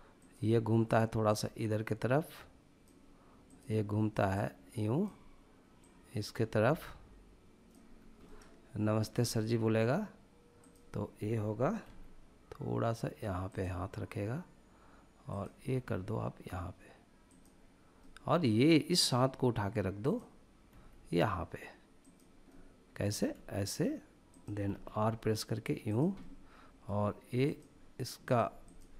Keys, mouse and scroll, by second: 7.7 scroll down 1, 8.0-10.4 middle drag, 10.4-10.9 drag, 11.6 g, 13.3-15.2 drag, 15.5 g, 17.1 click, 17.7-19.8 middle drag, 19.8 click, 20.5 g, 21.8 click, 22.3-22.8 middle drag, 22.9 g, 24.1 click, 24.4 r, 25.7 click, 26.0-26.7 middle drag, 27.2 click, 28.0 click, 28.8-28.9 middle drag.